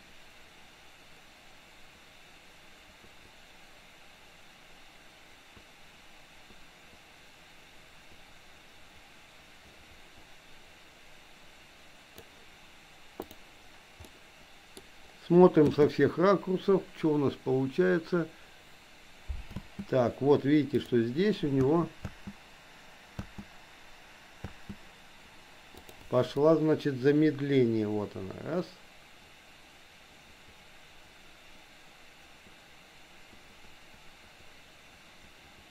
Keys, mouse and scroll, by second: 14.1 middle click, 15.7 space, 19.6 space, 20.8 click, 21.7 space, 22.1 space, 23.2 space, 24.4 space, 25.8 click, 26.6-35.7 drag.